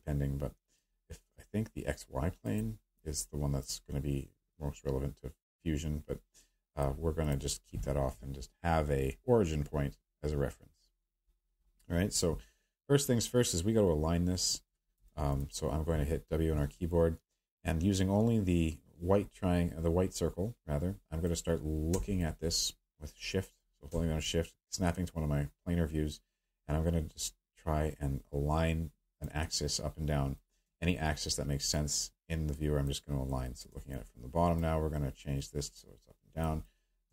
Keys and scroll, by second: 16.2 w.